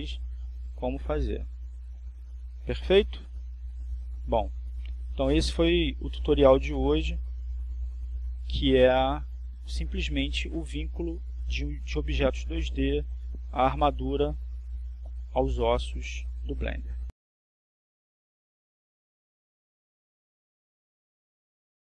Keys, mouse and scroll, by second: 0.3 click, 2.8 click, 4.3 click, 5.5 click, 6.8 right click, 7.7 r, 9.1 click, 10.4 right click, 11.3 r, 12.3 click, 18.1 right click, 18.9 r, 20.0 click, 20.7 right click, 21.1 r, 21.5 click.